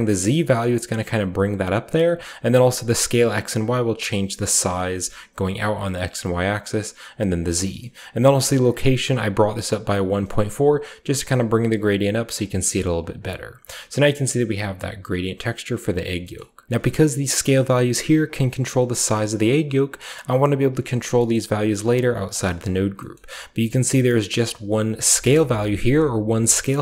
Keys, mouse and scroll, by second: 0.0-0.1 typing, 2.5-4.9 shift+drag, 2.9-7.5 shift+middle drag, 2.9 typing, 6.3-7.3 drag, 8.6-10.1 shift+drag, 8.6-11.8 shift+middle drag, 9.8-10.6 typing, 12.3 shift+middle click, 12.4-12.9 shift+scroll down 1, 13.1-13.5 shift+scroll down 1, 13.5 shift+scroll up 1, 13.7-15.3 shift+middle drag, 15.3 scroll up 1, 15.3-15.8 scroll down 1, 15.8-19.1 drag, 16.6 j, 16.6 x, 19.3-21.0 shift+drag, 21.0-22.8 scroll down 1, 21.3 middle click, 21.4-24.2 drag, 22.0 middle click, 22.6 typing, 23.1-24.2 scroll up 1, 24.2-26.8 scroll up 1, 24.3-26.8 drag.